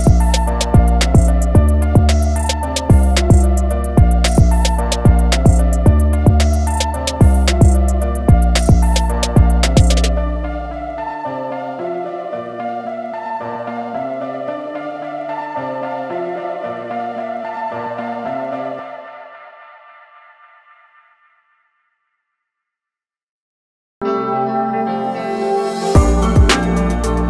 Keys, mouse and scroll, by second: 1.4-1.7 typing, 2.6 click, 2.8 i, 3.4 click, 4.0 a, 5.0 click, 11.0 a, 11.3 click, 12.9 i, 13.5 click, 13.7 a, 13.9 click.